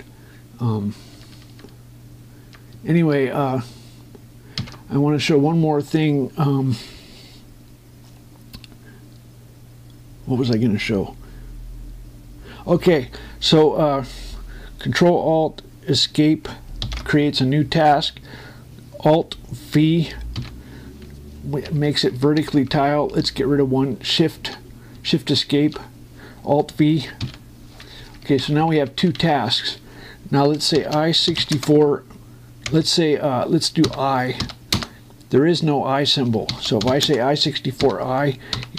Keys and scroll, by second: 3.7 shift+Escape, 5.3 ctrl+Down, 21.1 alt+v, 22.4 Up, 23.1 Down, 26.3 shift+Escape, 27.9 alt+v, 28.7 Up, 29.1 Down, 32.1 4, 32.3 space, 33.4 BackSpace, 34.6 i, 35.4 Return, 37.8 space.